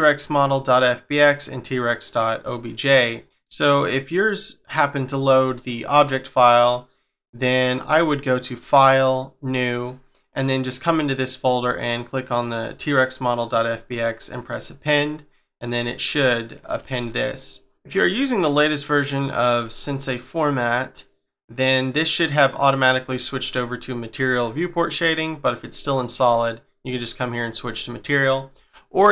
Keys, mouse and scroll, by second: 3.2 middle click, 6.4 scroll down 2, 8.5 click, 10.8 scroll down 2, 12.6 click, 15.3-16.6 scroll up 3, 16.6 shift+middle click, 17.7 scroll down 3, 24.1 click, 28.5-29.1 scroll up 3.